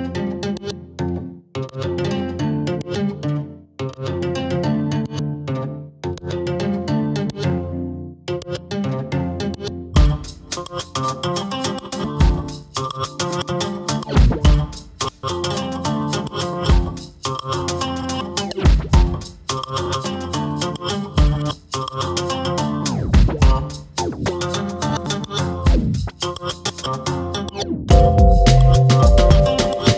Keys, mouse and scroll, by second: 0.1 r, 0.6 middle click, 1.4 scroll up 1, 1.6 click, 2.5 middle click, 3.0 KP_1, 3.3-3.7 scroll up 2, 3.7 shift+middle click, 4.2 ctrl+right click, 4.6 r, 5.3 g, 6.1 scroll down 1, 6.3 middle click, 6.9 click, 7.6 middle click, 8.3 click, 8.5 middle click, 8.7-9.2 scroll up 1, 9.2 r, 10.7 click, 11.2 click, 11.8 KP_1, 12.7 r, 14.2 ctrl+right click, 14.7 r, 15.4 scroll down 1, 15.6-16.8 middle drag, 16.8 click, 17.6 ctrl+z, 17.9 middle click, 18.4 click, 19.4 click, 20.3 middle click, 20.6 click, 20.9 KP_1, 21.4 r, 22.1 g, 23.7 ctrl+right click, 24.1 r, 24.8 g, 25.3 scroll down 1, 25.4 middle click, 25.8-26.3 scroll up 2, 26.3 shift+click, 26.6 click, 27.6 click, 27.9 KP_1, 29.1 ctrl+right click, 29.6 r.